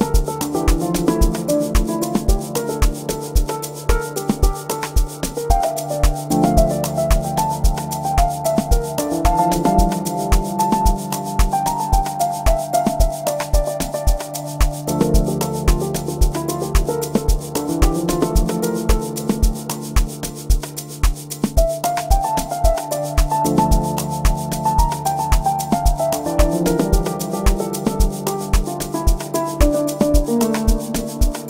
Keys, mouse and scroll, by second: 1.1 right click.